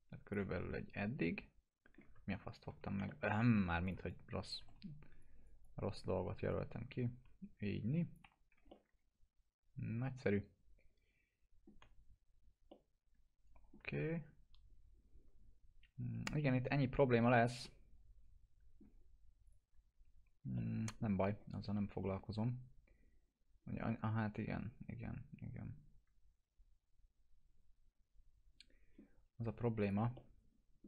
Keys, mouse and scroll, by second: 0.5-2.3 alt+middle drag, 2.2 ctrl+z, 3.0 alt+middle click, 3.5 F3, 3.8-4.7 click, 4.3-5.2 typing, 5.2 click, 6.5-8.3 drag, 8.2 F3, 8.7-11.8 alt+middle drag, 12.7-13.9 alt+middle drag, 17.2-19.1 alt+middle drag, 19.4 click, 20.5-21.1 alt+middle drag, 23.8-29.1 alt+middle drag, 29.8 click, 30.1-30.8 alt+middle drag.